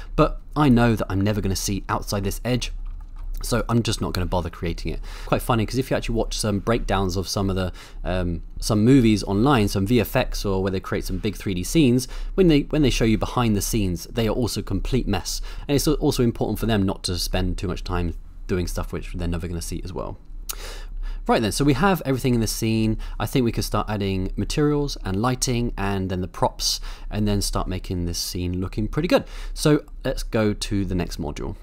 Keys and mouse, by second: 0.0 middle click, 2.6 middle click, 3.0 shift+middle drag, 3.5 click, 5.2 shift+middle click, 20.4 middle click, 20.9-23.0 middle drag.